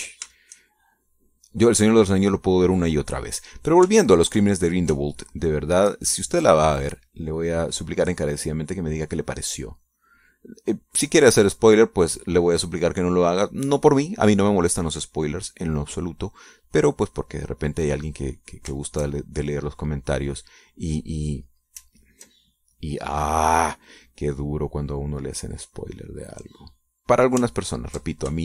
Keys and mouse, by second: 1.5-4.4 shift+drag, 5.2 ctrl+click, 6.6 shift+click, 7.3-13.5 shift+drag, 13.8-22.4 drag, 23.2 ctrl+click, 24.0-25.0 drag, 25.2-28.2 drag.